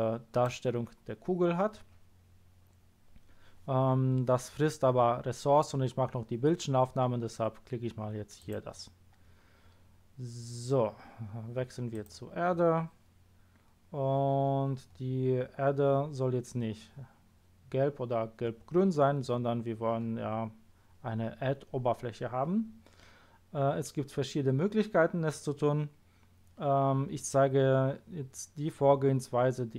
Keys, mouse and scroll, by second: 8.4 click, 11.9 click.